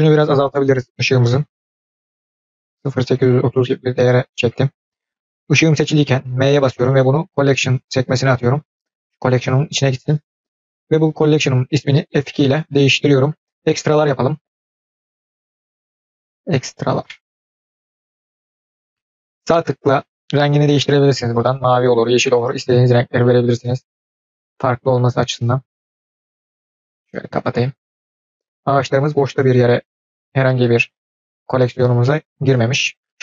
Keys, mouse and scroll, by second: 11.0 click, 12.1 F2, 19.7-21.7 right drag, 23.1-25.8 right drag, 26.6 drag, 28.3 drag, 32.3 click, 33.0-33.2 middle drag.